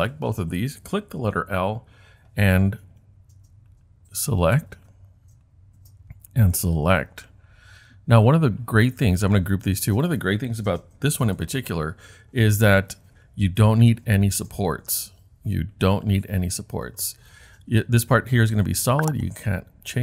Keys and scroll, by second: 11.3 super+g.